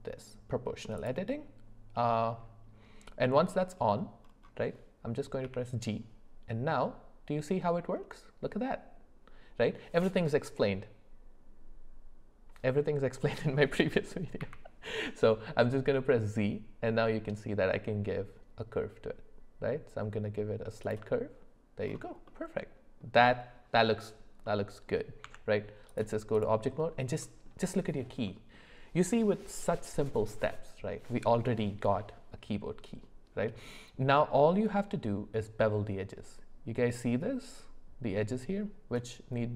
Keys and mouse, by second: 1.0 click, 5.4 g, 22.2 middle click, 24.5 middle click, 25.2 Tab, 27.2 middle click, 28.3 middle click.